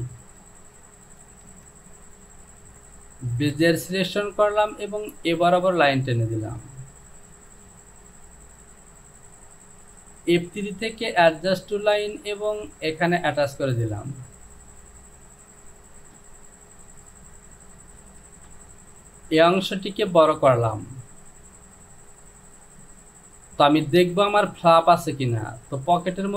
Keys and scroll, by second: 18.4 Return.